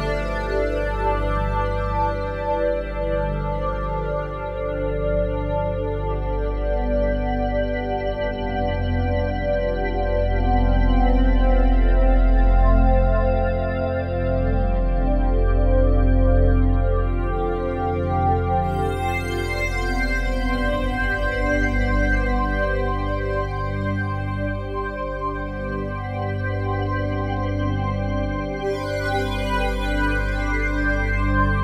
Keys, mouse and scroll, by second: 3.7 Tab, 4.6-5.9 typing, 13.0-19.4 alt+shift+drag, 24.3 Escape, 25.2 click, 26.9 g, 27.3 z, 30.3-31.6 ctrl+alt+drag.